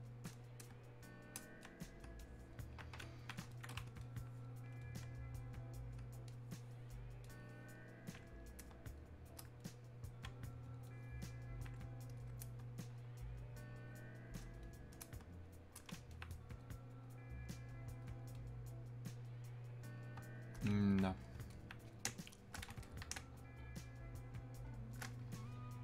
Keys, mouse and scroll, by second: 0.3-4.1 shift+drag, 4.1-16.2 alt+drag, 16.2-21.5 alt+drag, 21.5 alt+click, 22.1 space, 22.9 click, 23.2 space, 23.9 click, 24.0 space, 25.2 space.